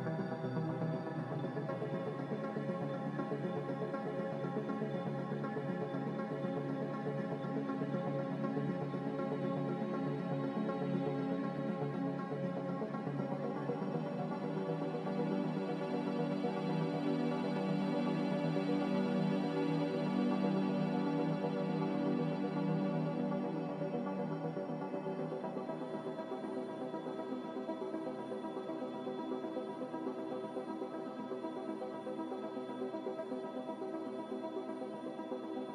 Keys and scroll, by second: 28.6 b, 30.0 Delete, 35.0 n.